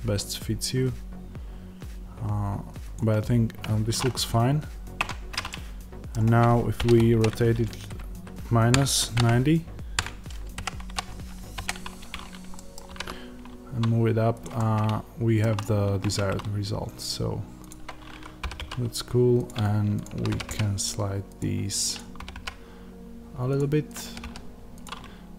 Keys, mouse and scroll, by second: 4.9 Tab, 5.4-14.3 middle drag, 6.7 r, 12.8 g, 14.3 click, 14.5-17.6 middle drag, 15.5-15.9 scroll, 15.9 Tab, 17.6 click, 18.3 g, 19.9 shift+click, 20.2 g, 21.3 click, 22.1 g, 23.5 click, 23.9 g, 24.7 click.